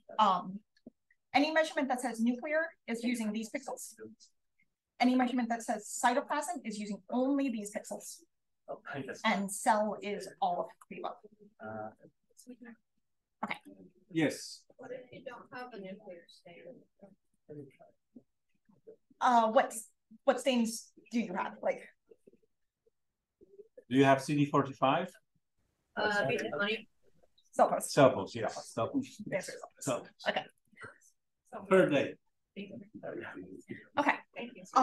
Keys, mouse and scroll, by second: 0.5-0.9 drag, 0.5-0.9 right drag, 0.5-3.2 scroll up 1, 3.2-8.3 scroll up 1, 8.3-12.2 scroll up 1, 12.2 right click, 12.2-13.3 scroll up 1, 13.3 click, 13.3 right click, 13.3-18.5 scroll up 1, 18.5-23.7 scroll up 1, 23.7-24.3 scroll up 1, 24.3 scroll up 1, 27.1 click, 29.0 click, 30.4 click, 30.6-31.4 drag, 31.6-33.2 drag.